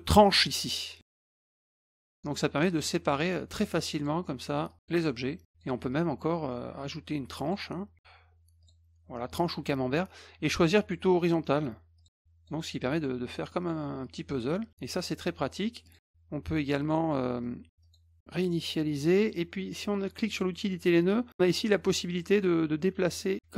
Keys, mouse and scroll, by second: 0.2 click, 1.0 middle click, 1.8-2.2 drag, 2.7 click, 2.8-3.2 drag, 4.0 click, 4.7 click, 5.4 click, 7.4 click, 8.1 scroll down 2, 8.6 click, 11.2 click, 12.0 click, 12.8 drag, 13.5 drag, 14.0-14.4 drag, 15.8 click, 17.1 scroll down 1, 17.8 click, 18.4 click, 20.3 click, 21.3 click, 23.1 click.